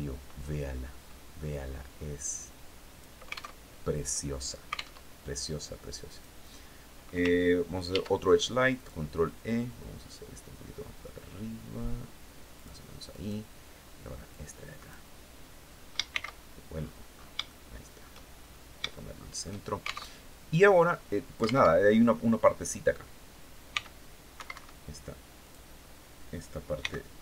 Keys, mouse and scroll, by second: 0.9-2.6 drag, 3.0 alt+Tab, 4.4 alt+Tab, 5.5 right click, 7.3 ctrl+e, 8.2 click, 12.0 click, 12.5 right click, 13.7 click, 15.5 shift+c, 16.2-16.5 scroll up 2, 16.8 shift+scroll up 1, 16.9 shift+middle click, 17.7-18.1 shift+scroll up 1, 18.4 shift+middle click, 19.5 alt+shift+Tab, 21.1 alt+Tab, 23.1 c, 24.8 click, 26.2 c, 26.9-27.2 drag.